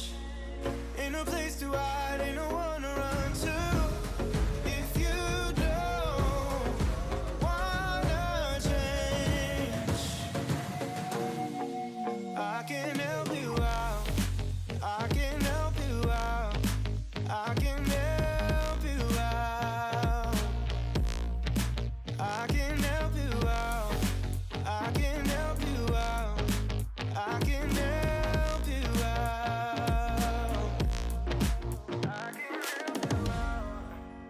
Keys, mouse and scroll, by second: 0.4 alt+click, 0.9 alt+shift+click, 1.2-2.4 middle drag, 2.4 alt+shift+click, 2.7 alt+shift+click, 3.1 middle click, 3.9 alt+e, 6.6 click, 6.9-8.3 middle drag, 8.4 scroll down 4, 8.7 click, 9.7 shift+middle drag, 9.9 scroll up 1, 10.1 click, 10.9-12.0 drag, 12.1-13.3 middle drag, 13.3 drag, 13.5 middle click, 14.0 KP_3, 14.3-15.6 scroll up 2, 15.6 shift+d, 16.3 s, 16.9-17.6 scroll up 3, 17.6 s, 18.4 s, 21.3 middle click, 21.8 scroll down 3, 21.9 shift+middle click, 22.6 scroll up 1, 22.8 g, 24.1 middle click, 24.4-24.8 scroll up 2, 24.8 middle click, 25.2 e, 27.2 ctrl+z, 27.5 ctrl+z, 27.9 e, 29.1 KP_3, 29.4 alt+z, 29.6 shift+middle click, 30.2 click, 32.2 click.